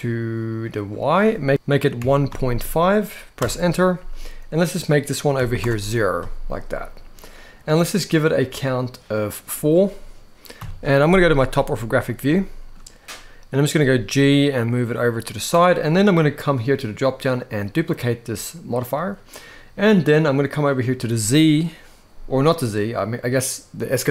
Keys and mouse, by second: 0.4-3.1 drag, 4.2-5.3 drag, 8.2 click, 8.9 click, 10.2 KP_7, 12.0 shift+middle click, 15.2 g, 16.2-22.3 drag.